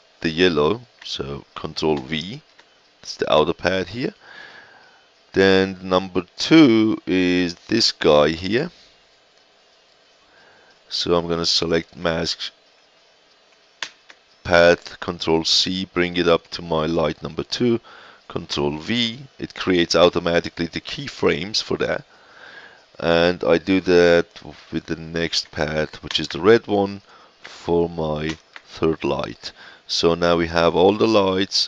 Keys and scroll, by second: 1.9 ctrl+v, 13.8 ctrl+c, 18.4 ctrl+v, 26.0 ctrl+c, 28.2 ctrl+v.